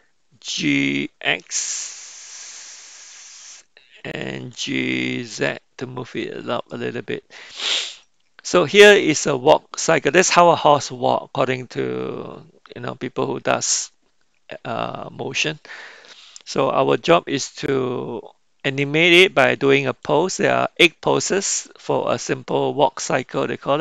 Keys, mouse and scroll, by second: 0.9 g, 4.5 g.